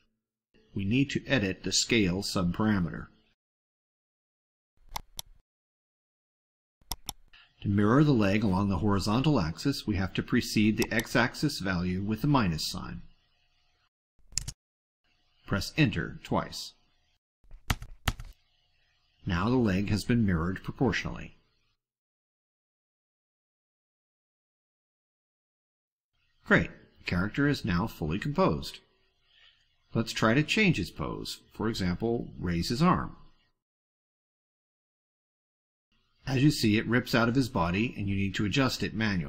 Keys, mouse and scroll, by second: 4.9 click, 6.8 click, 10.6 click, 14.5 -, 17.6 Return, 23.9-24.3 drag, 24.4 click, 24.9 click, 25.4 click, 26.2 click, 26.6 click, 27.2 ctrl+scroll down 2, 27.6 ctrl+middle click, 27.8-28.2 ctrl+scroll down 4, 28.7 middle click, 30.7 click, 32.0 ctrl+middle click, 33.8 click, 35.1-36.1 drag.